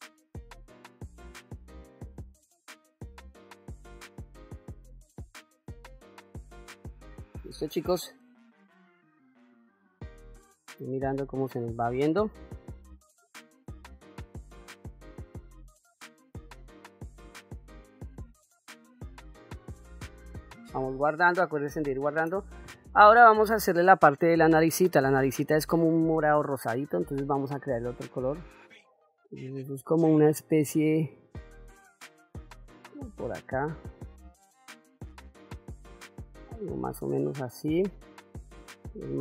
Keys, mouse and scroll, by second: 0.8 middle click, 1.0 click, 1.5 middle click, 1.9 click, 2.4 click, 2.5 middle click, 2.7 ctrl+middle click, 2.9 middle click, 3.3 ctrl+middle click, 3.5 shift+middle click, 3.7-6.1 drag, 6.4 shift+middle click, 7.0 ctrl+middle click, 7.9 ctrl+middle click, 9.5 click, 14.6-17.9 drag, 18.8 click, 20.0 ctrl+s, 24.5 click, 27.9-37.5 drag, 38.4-39.2 drag.